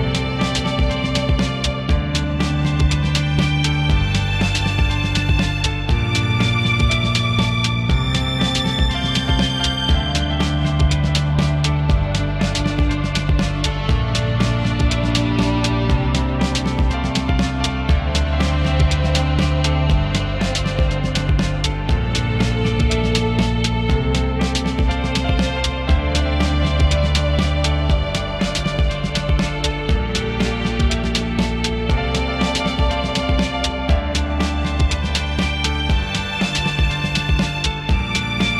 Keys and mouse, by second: 1.3 shift+middle click, 1.5 click, 1.9 ctrl+click, 2.3 ctrl+click, 2.9 shift+middle click, 3.1 middle click, 3.4 f, 4.4 click, 4.5 ctrl+middle click, 4.7 click, 6.9 shift+middle click, 7.3 click, 7.8 ctrl+click, 8.5 ctrl+click, 8.8 click, 8.9 shift+middle click, 9.3 click, 10.1 ctrl+middle click, 10.4 ctrl+click, 11.2 ctrl+click, 11.7 ctrl+middle click, 12.0 ctrl+z, 12.3 shift+middle click, 12.7 click, 15.3 ctrl+click, 17.7 shift+middle click, 18.2 f, 18.3 ctrl+middle click, 18.5 click, 19.6 click, 22.1 shift+middle click, 22.3 click, 23.5 click, 23.7 shift+middle click, 24.2 click, 24.9 shift+middle click, 25.4 shift+middle click, 26.0 click, 28.3 shift+middle click, 28.5 shift+middle click, 29.0 shift+click, 30.8 click, 31.3 shift+middle click, 31.7 click, 32.0 shift+middle click, 32.4 ctrl+middle click, 32.7 click, 33.7 ctrl+click, 35.0 click, 35.1 shift+middle click, 36.1 shift+middle click, 37.2 shift+click, 38.3 shift+middle click.